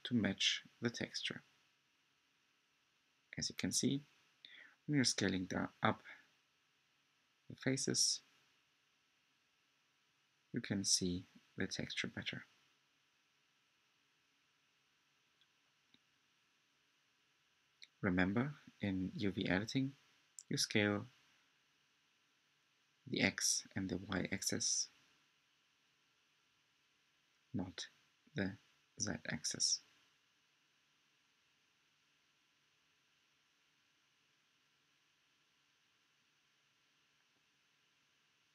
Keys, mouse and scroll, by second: 0.0-2.2 drag, 2.2-38.5 middle drag.